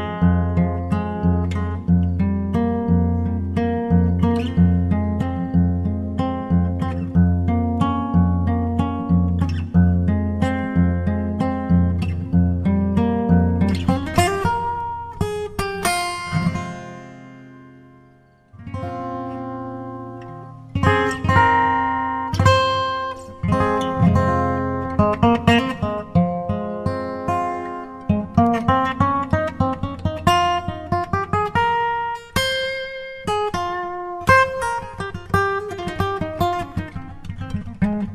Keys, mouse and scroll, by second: 0.0-1.5 drag, 3.6-5.4 drag, 7.6-9.2 drag, 16.0-17.5 drag, 20.0-21.6 drag, 28.1-29.7 drag, 30.0-31.8 drag, 33.0-34.7 drag.